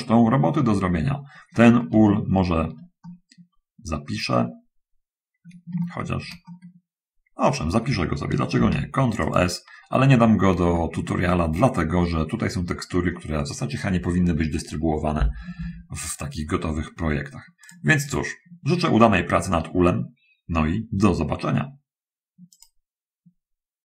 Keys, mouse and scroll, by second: 1.5-1.8 scroll up 2, 2.1 shift+middle click, 3.3-5.9 shift+middle drag, 6.0-7.9 shift+drag, 8.8 ctrl+s, 9.5 click, 10.3 middle click, 10.9 shift+click, 17.9 click, 18.3 click, 22.8 click.